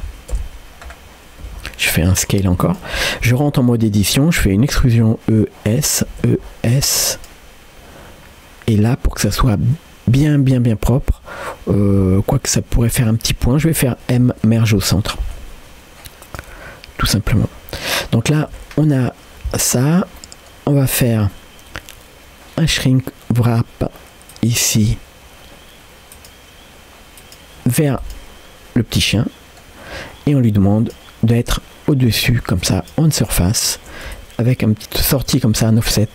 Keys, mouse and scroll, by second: 0.4 KP_Decimal, 0.9-1.4 scroll down 1, 1.4 s, 3.4 Tab, 3.8 scroll up 1, 4.6 e, 9.3-10.1 scroll up 3, 18.2 scroll down 1, 18.5 Tab, 19.9 scroll down 1, 20.2 middle click, 21.4 scroll up 1, 24.3-26.3 drag, 27.2-28.3 drag, 29.2 middle click, 29.9 scroll up 1, 30.8-32.9 drag, 34.1-36.1 shift+drag.